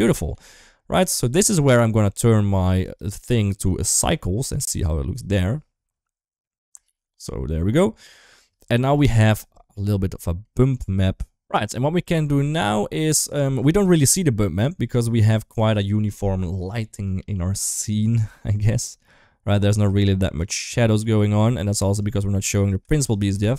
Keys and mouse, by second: 0.5 ctrl+s, 2.6 click, 3.3-3.9 drag, 4.3-5.5 drag, 6.6 ctrl+s, 8.0 shift+middle click, 8.7 shift+middle click, 9.9 middle drag, 12.1 middle click, 17.6 click, 18.6-19.5 middle drag, 21.8 click, 21.9 click, 22.7 ctrl+shift+click.